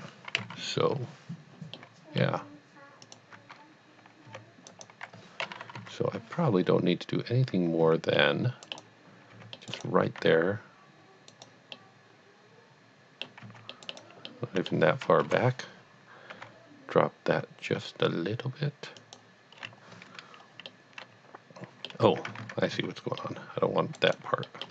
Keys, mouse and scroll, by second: 0.4 KP_1, 1.7 middle click, 2.2 middle click, 3.1 alt+click, 3.3 click, 4.2 c, 4.7 right click, 5.6 KP_1, 6.5 KP_1, 7.8 c, 8.2 middle click, 8.6 right click, 9.3 right click, 9.4 c, 9.5 middle click, 9.7 right click, 10.3 g, 11.3 right click, 11.7 middle click, 12.2 middle click, 13.4 middle click, 13.6 c, 13.8 middle click, 13.9 right click, 14.3 middle click, 14.7 middle click, 14.9 middle click, 15.2 KP_1, 16.4 g, 19.0 g, 19.1 click, 19.6 scroll up 1, 20.7 middle click, 21.0 middle click, 22.4 z, 22.8 c, 23.2 middle click, 24.1 right click, 24.5 middle click.